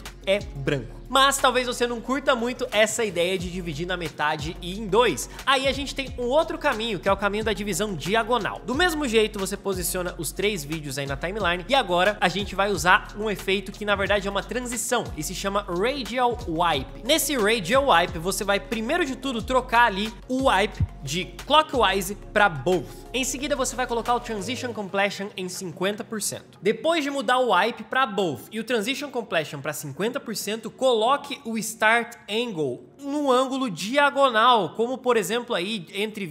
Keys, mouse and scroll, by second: 16.3-16.6 typing, 24.2-26.5 drag.